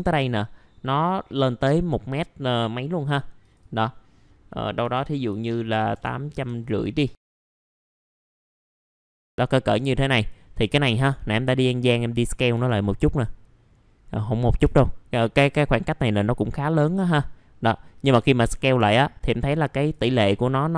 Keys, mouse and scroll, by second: 4.8 KP_8, 7.2 middle click, 7.4 right click, 7.6-8.7 drag, 9.7 middle click, 10.1 click, 12.5 w, 13.1-14.5 drag, 14.6 r, 15.4-18.7 drag, 18.9 alt+middle click, 19.7 click.